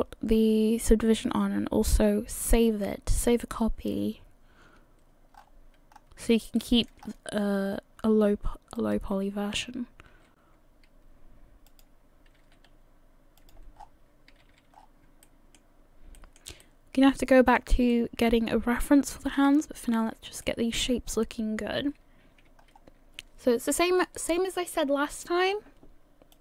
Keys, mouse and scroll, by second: 5.5 scroll up 1, 6.8 shift+middle click, 6.8-8.4 scroll up 9, 8.4-8.8 scroll up 1, 8.8 alt+right click, 10.2 s, 12.4 g, 13.8 scroll down 6, 14.3 a, 14.5 a, 14.8-15.1 scroll down 1, 15.2 shift+middle click, 16.2 shift+middle click, 16.7 shift+middle click, 18.1 shift+middle click, 19.4 KP_3, 20.4 shift+middle click, 21.2 scroll up 3, 22.1-22.5 scroll up 1, 22.6-23.4 scroll down 1.